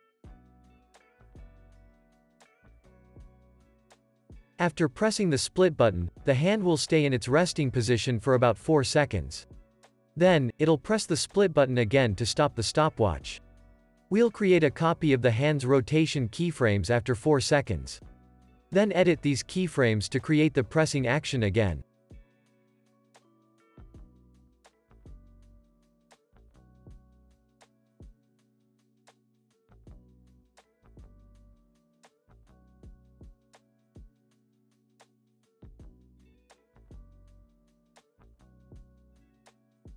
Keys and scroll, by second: 1.5 super+s, 4.8 u, 17.4 super+c, 17.6 super+v, 25.4 super+c, 25.7 super+v, 26.6 space, 27.9 space, 28.2 super+s, 30.3 z, 31.4 x, 38.4 F9.